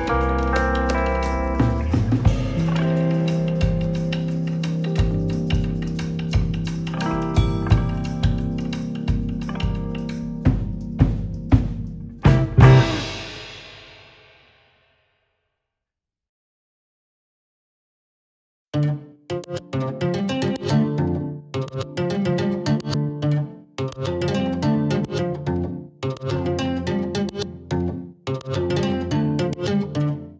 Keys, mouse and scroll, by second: 3.2-4.1 drag, 6.0 click, 6.2-7.5 shift+middle drag, 7.5-7.9 scroll up 3, 7.6 shift+middle drag, 7.9 shift+middle drag, 8.2-9.3 drag, 9.3 Tab, 10.8 click, 11.1 l, 12.9 middle click, 13.9-14.5 scroll up 1, 14.5 l, 14.8 l, 15.7-18.3 drag, 18.6-21.9 drag, 21.9 Tab, 22.3 scroll down 1, 22.4 middle click, 22.9 scroll up 4, 23.1-23.9 shift+middle drag, 23.9 scroll down 1, 24.0-24.8 middle drag, 24.8-25.4 scroll up 2, 25.4 scroll down 1, 25.7-26.2 shift+middle drag, 26.2 scroll down 1, 26.3-26.6 middle drag, 26.6 scroll up 1, 26.7-27.2 shift+middle drag, 27.2 click, 28.0 click, 28.2 middle click, 28.8 Tab, 29.4 click, 29.7 l, 30.1 l.